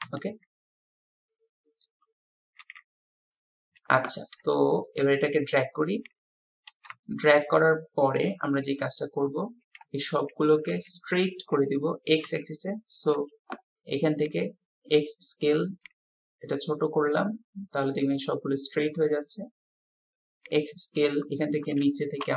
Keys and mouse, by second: 4.5-4.9 shift+drag, 6.8 click, 7.1 shift+click, 8.2 KP_7, 9.9 KP_1, 12.5 shift+click, 19.1 click, 22.1 click.